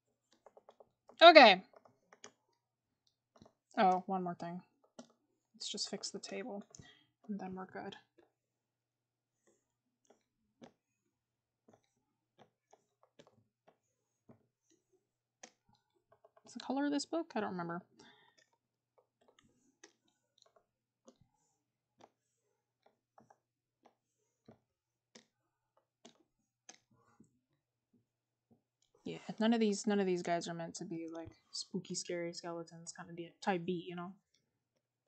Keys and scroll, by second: 6.6-7.0 scroll up 1, 16.1 scroll up 1, 18.2 scroll.